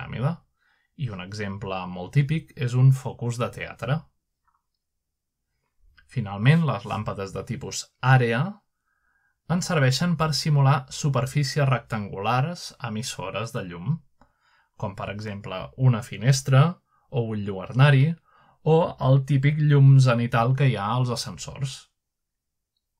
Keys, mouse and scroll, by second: 0.8-3.2 drag, 3.8-4.1 typing, 5.0 right click, 6.1-8.5 drag, 8.6 click, 10.4 click, 11.4 click, 12.0-13.0 middle drag, 12.9 click, 13.5 click, 14.3-16.0 middle drag, 16.0-19.7 drag, 21.1-22.3 drag.